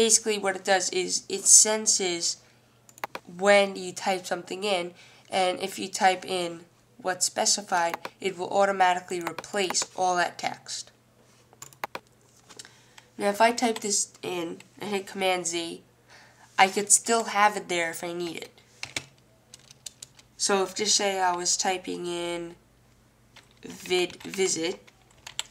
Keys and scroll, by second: 13.2-14.3 typing, 15.6 w, 23.7-25.5 typing.